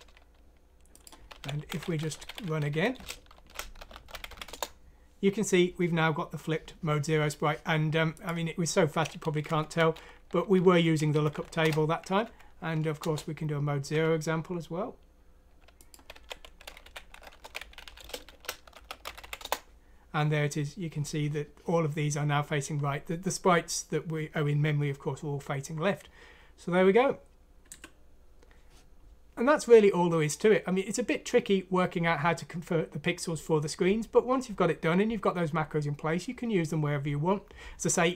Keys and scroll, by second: 1.0-4.8 typing, 9.5 Home, 10.5-11.5 typing, 11.1 Down, 11.3 Down, 12.2 F9, 13.0 Return, 13.0 typing, 15.9-19.7 typing.